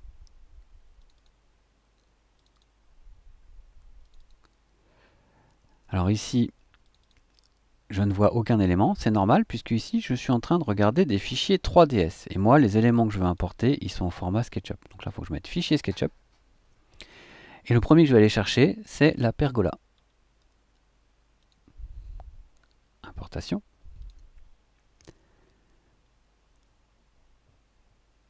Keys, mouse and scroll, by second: 0.9 click, 2.3 click, 4.0 click, 6.8 click, 13.2 click, 15.2 click, 19.1-19.4 scroll down 2, 19.9 scroll down 2, 21.4 click, 24.0 click.